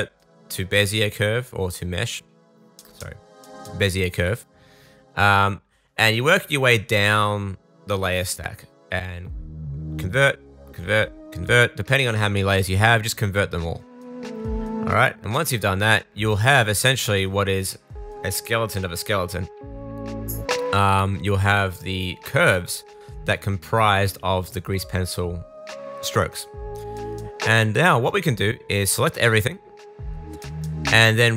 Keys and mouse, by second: 2.1-7.0 middle drag, 9.8 middle click, 13.4 middle click, 16.8 middle click, 19.8 click, 20.3-25.6 middle drag, 25.6-26.9 drag, 26.9-30.6 shift+middle drag, 30.6-31.3 drag.